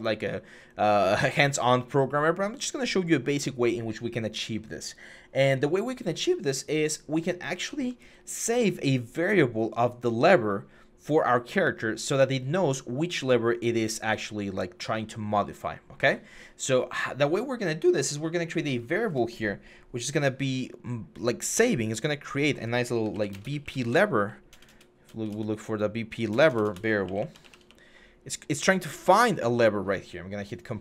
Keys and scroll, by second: 22.8-25.1 typing, 26.1-27.7 typing.